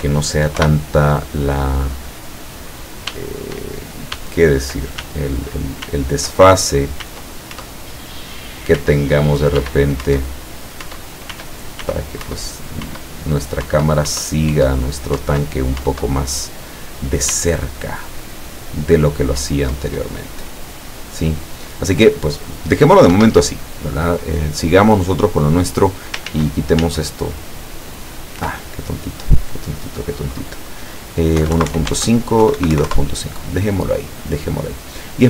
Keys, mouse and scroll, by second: 0.7 p, 3.2 w, 4.2 s, 7.1 s, 7.6 Up, 8.9 s, 9.7 w, 10.1 Up, 11.0 Up, 11.4 s, 12.3 Up, 13.8 Up, 17.4 w, 23.2 Escape, 24.1-24.4 scroll down 2, 24.6-25.1 middle drag, 25.6-26.2 middle drag, 26.3 ctrl+z, 29.4 click, 31.4-32.8 typing, 31.9 Tab, 32.9 KP_Enter, 34.7 scroll down 2, 35.1-35.2 middle drag.